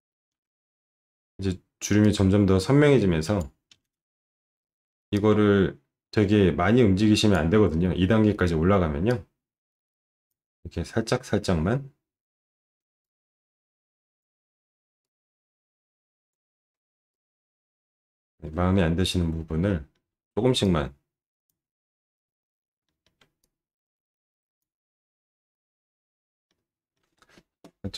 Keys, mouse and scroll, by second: 0.3 ctrl+shift+9, 5.2-7.3 drag, 9.2-10.3 drag, 13.0-14.2 drag, 15.1-16.3 drag, 17.1 click, 18.7 alt+middle click, 19.9 alt+middle click, 20.7 click, 23.0 alt+middle click, 23.5-24.6 drag, 26.5 alt+middle click.